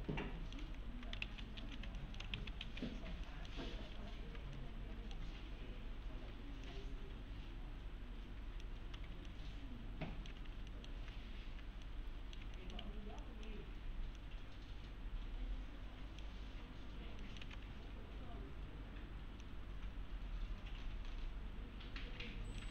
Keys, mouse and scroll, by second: 0.0 scroll down 1, 0.2-0.8 alt+middle click, 0.6 alt+x, 1.2 ctrl+z, 2.0 alt+middle click, 2.3 ctrl+alt+z, 3.3 alt+middle click, 3.7 scroll up 1, 4.0 1, 4.6-5.2 alt+middle click, 6.2 s, 6.7-8.9 click, 8.8 s, 9.3-10.6 alt+middle click, 10.4 1, 10.7 alt+middle click, 11.8-12.5 alt+middle click, 12.8 1, 13.2 click, 17.2 middle click, 17.4 alt+w, 19.4-22.7 click.